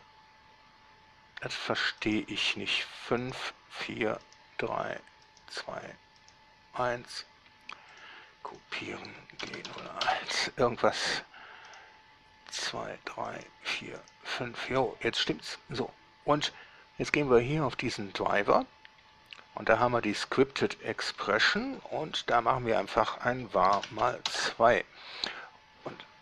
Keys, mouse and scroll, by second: 0.1 right click, 1.7 scroll down 2, 2.3 right click, 3.5 middle click, 5.5 middle click, 6.5 middle click, 8.2 drag, 8.8 click, 9.7 shift+g, 9.9 0, 10.1 1, 10.3 Return, 11.9 right drag, 12.8 right drag, 13.5-13.9 middle drag, 14.3 middle click, 15.0 middle click, 20.1 click, 21.5 Right, 21.7 Left, 21.9 Left, 22.1 Left, 22.3 Left, 22.5 Left, 24.3 shift+2, 24.5 Return.